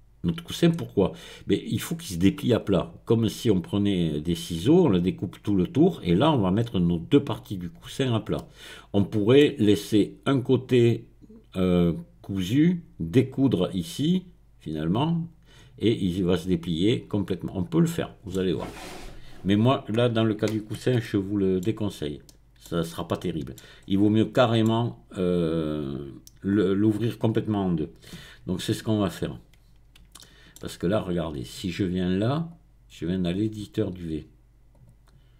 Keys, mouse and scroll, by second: 0.7-1.7 scroll up 1, 7.9-8.3 scroll down 1, 8.3-14.5 middle drag, 17.5-18.7 scroll down 1, 19.6 click, 20.6-21.0 scroll up 1, 21.0 shift+middle click, 21.9-22.3 scroll up 1, 22.7 shift+middle click, 23.6 shift+middle click, 23.8-24.3 scroll up 2, 24.3 middle click, 28.2 Tab, 28.6-29.6 scroll up 2, 30.2 shift+middle click, 30.6-31.5 shift+scroll down 1, 32.5 click, 34.7 click.